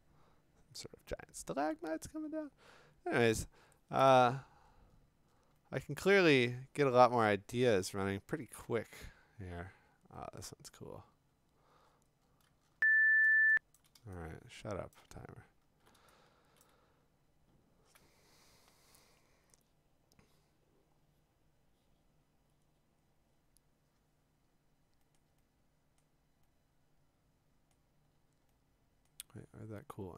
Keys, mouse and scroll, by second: 4.3-6.9 scroll, 7.2 scroll, 8.5-8.9 scroll, 9.7 scroll, 10.7-11.2 scroll, 11.8-13.2 scroll, 13.8-14.9 click, 14.5 click, 14.9 click, 15.1 click, 15.2-15.7 scroll, 16.6 click, 16.8-17.4 scroll, 24.4 scroll down 2, 25.2 scroll up 1, 25.6-26.0 scroll, 27.7-28.2 scroll, 29.1-30.1 scroll.